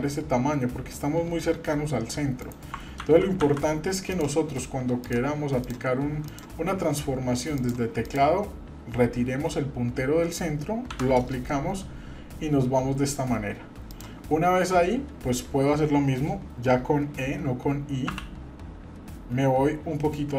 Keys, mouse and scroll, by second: 3.0 ctrl+z, 3.4 ctrl+z, 4.1 click, 5.0 click, 5.6 click, 6.2 click, 7.5 click, 8.1 click, 10.9 i, 18.1 e.